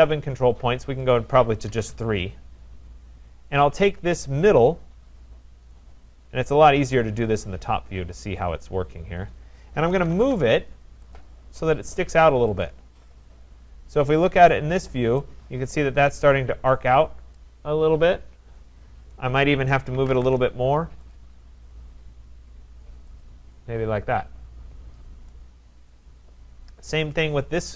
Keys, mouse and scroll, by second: 1.0 click, 1.4-2.2 typing, 3.6 click, 5.7 click, 5.9 click, 6.1 3, 6.8-7.3 scroll, 7.8-8.4 scroll, 8.8-9.9 scroll, 9.6-11.1 typing, 11.1 middle click, 11.1 click, 12.6 click, 13.7 middle click, 13.7 middle click, 14.5 right click, 14.6 Return, 14.6-15.1 scroll, 17.3 right click, 18.9 middle click, 19.7-20.6 typing, 21.1 click, 23.2 click, 25.9 right click, 27.1 click, 27.6-27.7 scroll.